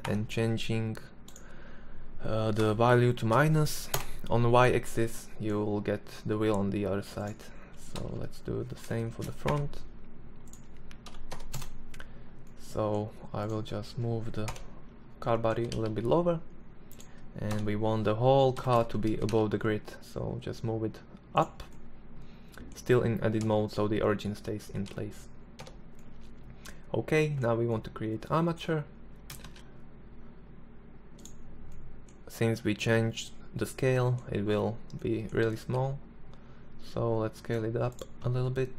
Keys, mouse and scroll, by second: 2.5-6.6 middle drag, 7.3 ctrl+l, 8.4 shift+d, 13.8 ctrl+l, 14.8 g, 16.8 KP_1, 17.9 a, 18.1 a, 18.6 g, 21.1-22.7 middle drag, 22.7 Tab, 23.9 Tab, 24.2 z, 24.9 Tab, 28.7 shift+a, 35.0 s, 38.2 s.